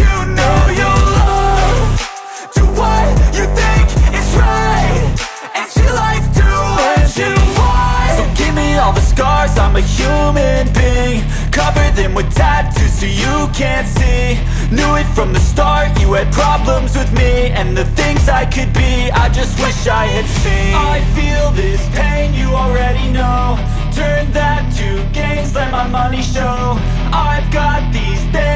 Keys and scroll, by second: 0.0-2.5 typing, 3.7-5.4 typing, 5.8 Down, 6.0 Return, 6.6 ctrl+c, 6.9 ctrl+v, 7.4-9.2 typing, 9.4 ctrl+Left, 10.4 ctrl+Left, 10.8 ctrl+Delete, 11.1-13.1 typing, 13.6 End, 13.7 Return, 14.2 Return, 14.5-24.9 typing, 24.9 Return, 25.2 ctrl+s, 28.0 Return, 28.2 Return.